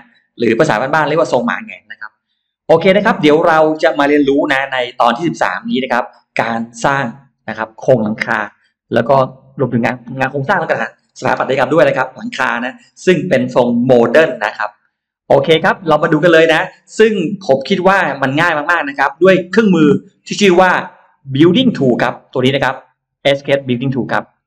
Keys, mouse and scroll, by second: 21.7 click.